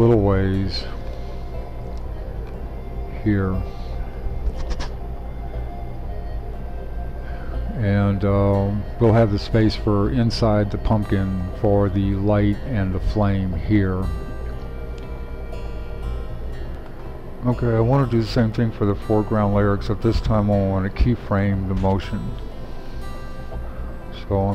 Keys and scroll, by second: 16.7 shift+super+3.